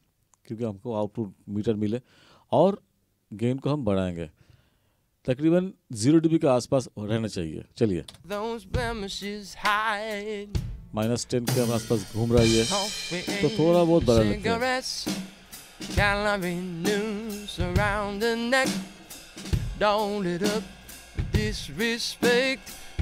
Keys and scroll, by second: 8.1 space.